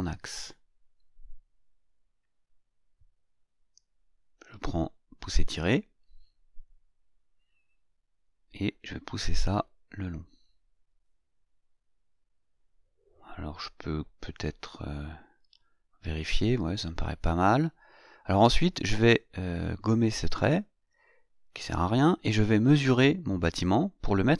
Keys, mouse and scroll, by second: 1.8 click, 5.5 click, 6.8 click, 10.6 click, 13.0 middle click, 13.1 scroll up 1, 15.8-16.1 scroll down 1, 18.0 click, 19.5 click, 24.0 click.